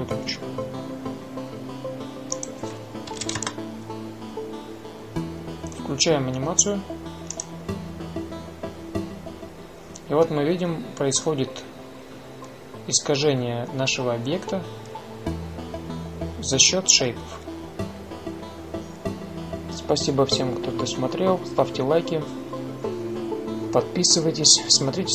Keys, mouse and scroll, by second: 3.1-5.0 drag, 11.1 drag.